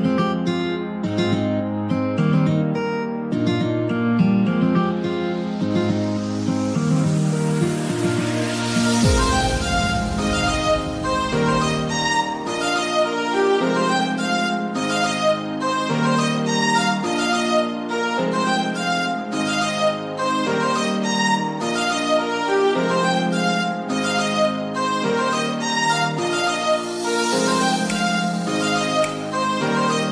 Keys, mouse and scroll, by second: 0.0 shift+click, 0.7-3.7 middle drag, 5.0-8.1 middle drag, 6.5-6.9 scroll down 1, 8.1-16.3 drag, 16.3 middle click, 17.2-18.2 scroll down 2, 18.2 click, 18.2-18.6 scroll down 1, 18.6 click, 19.5-27.8 drag, 22.8 3, 23.0 Return, 25.5 1, 26.8 Return, 27.8-28.1 scroll down 1, 28.1-29.5 middle drag, 29.5-30.1 drag.